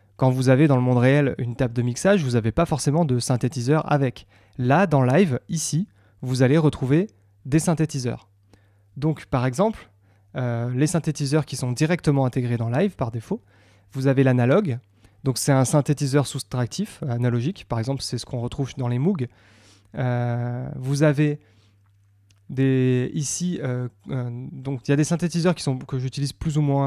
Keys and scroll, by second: 1.2 Tab, 4.5 Tab.